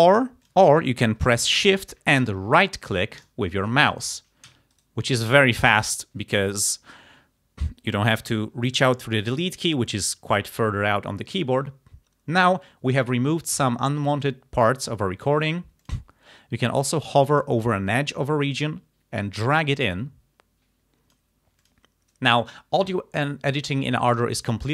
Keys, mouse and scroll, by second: 0.1 ctrl+z, 0.5 click, 3.2 shift+right click, 4.0 shift+click, 4.7 shift+right click, 15.9 click, 18.5-21.4 drag, 21.6 click.